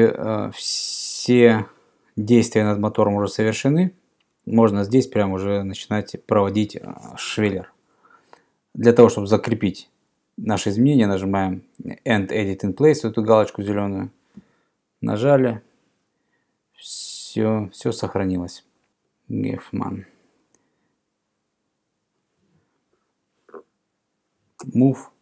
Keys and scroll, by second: 24.7 m.